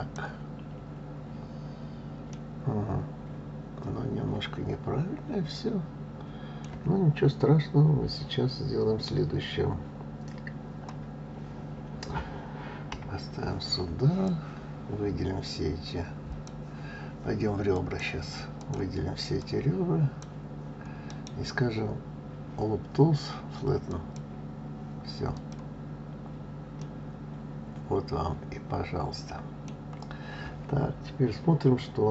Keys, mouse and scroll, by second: 0.6 scroll up 1, 2.3-5.3 middle drag, 12.9 KP_1, 14.2 click, 17.7 click, 18.6 click, 19.4 click, 21.0-24.1 right drag, 25.3 click, 26.8-29.8 middle drag.